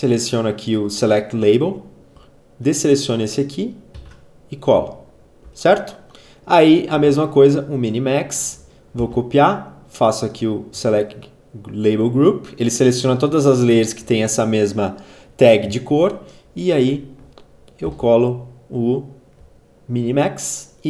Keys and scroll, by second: 3.8 ctrl+v, 8.9 ctrl+c, 17.7 ctrl+v.